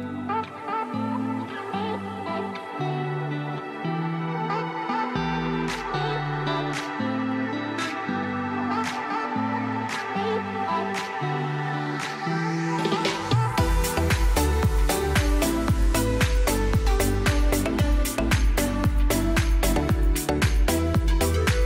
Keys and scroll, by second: 1.2 c, 1.4 e, 1.7 shift+F2, 2.1 F3, 2.4 Escape, 3.2 ctrl+Page_Down, 10.8 F4, 11.2 Escape, 12.3 F6, 15.7 space, 18.6 5, 18.7 0, 19.2 3, 19.3 0, 19.4 Return.